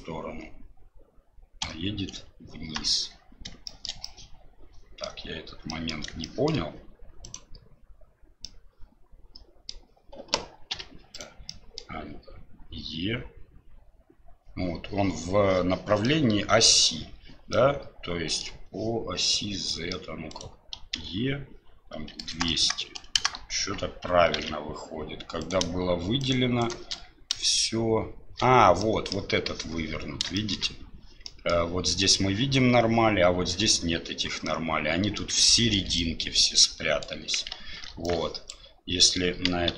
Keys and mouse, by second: 3.8 shift+middle click, 4.2 middle click, 5.8 middle click, 6.4 shift+middle click, 7.2-8.4 drag, 8.4-9.7 middle drag, 11.5 middle click, 16.2 middle click, 17.5 middle click, 19.7 middle click, 24.4 ctrl+z, 28.8 middle click, 30.3 shift+middle click, 31.2 middle click, 34.5 middle click, 35.4 shift+middle click, 36.0-37.0 middle drag, 37.9 alt+b.